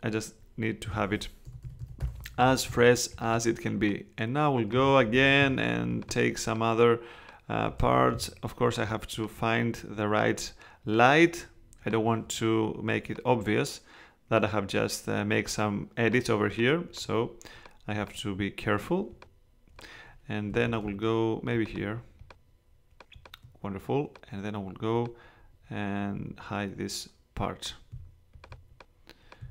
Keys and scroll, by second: 1.4 alt+[, 2.7 alt+[, 5.1 alt+super+z, 7.8 super+z, 20.5 super+z.